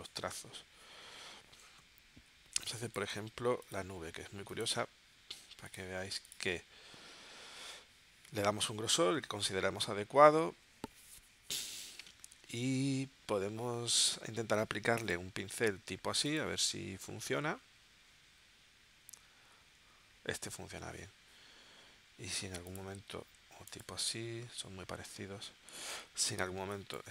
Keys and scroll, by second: 2.7 space, 26.6 space.